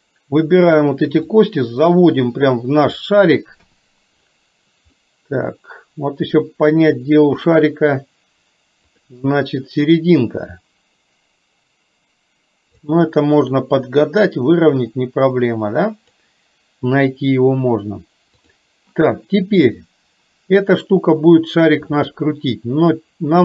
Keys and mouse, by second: 1.4-3.0 drag, 3.8 KP_7, 5.0-6.4 middle drag, 7.3 KP_3, 10.5-12.9 drag, 13.8-16.2 drag.